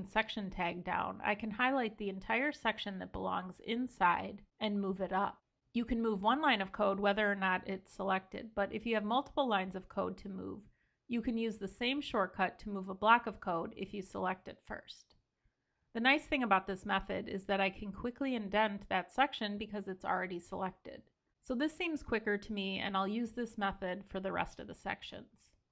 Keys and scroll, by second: 3.2 ctrl+l, 5.8 ctrl+l, 14.2 ctrl+super+Up, 17.4 super+], 25.4 ctrl+l.